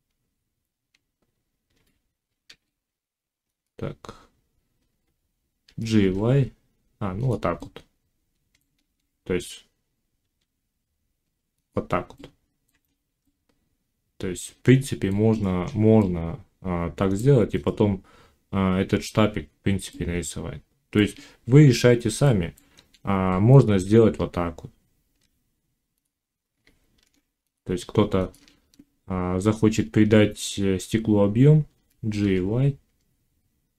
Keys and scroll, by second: 1.6 g, 5.5 g, 8.7 ctrl+z, 10.2 e, 22.6 ctrl+z, 23.8 Tab, 26.9 ctrl+r, 28.4 shift+Tab, 31.6 g.